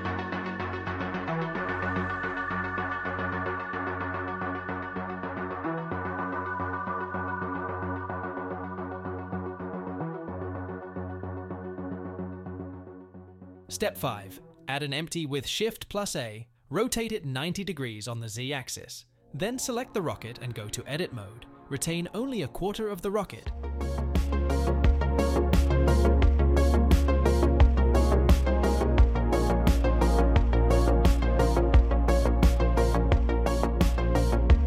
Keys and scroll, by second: 0.5 ctrl+b, 4.3 e, 4.7 alt+s, 10.6 s, 10.9 z, 15.2 shift+a, 18.5 r, 18.9 z, 19.5 9, 19.7 0, 20.5 Return, 22.5 Tab, 23.7 1, 28.6 c, 29.9 c, 31.8 x.